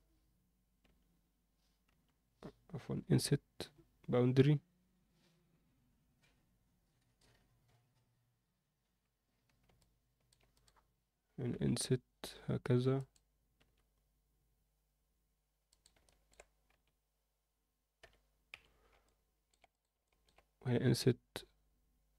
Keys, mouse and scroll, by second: 9.7 alt+middle click, 10.5 click, 11.5 i, 13.8 e, 16.0 middle click, 16.7 i, 19.0 alt+middle click, 19.7 click, 20.0 alt+middle click, 20.8 i.